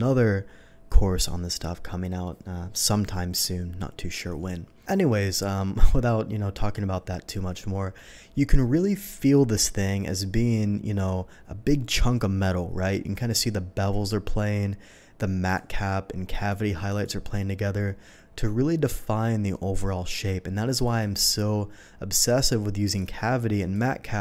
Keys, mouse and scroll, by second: 1.1 typing, 4.8-5.5 middle drag, 5.9 middle click, 7.0-7.9 middle drag, 8.5 middle drag, 15.4 click, 16.3 click, 16.8 click, 20.8 click, 22.8 click, 23.5 click.